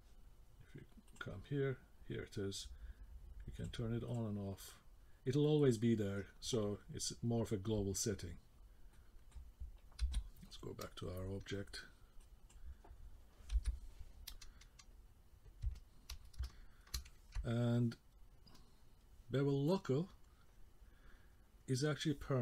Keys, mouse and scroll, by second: 1.1 click, 4.1 click, 5.4 middle click, 8.9 middle click, 10.1 k, 11.1 middle click, 12.2 click, 13.8 k, 15.7 middle click, 16.4 shift+middle click, 18.6 click, 19.8 click, 21.7 click.